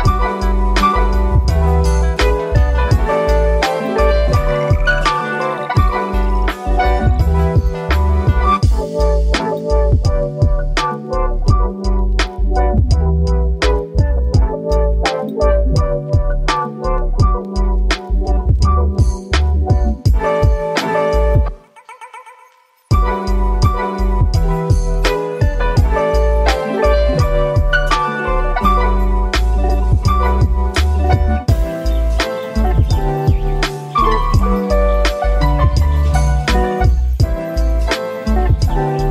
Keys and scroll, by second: 9.2 typing, 14.1 5, 14.2 5, 14.3 Return, 19.6-20.5 typing, 23.7-24.6 typing.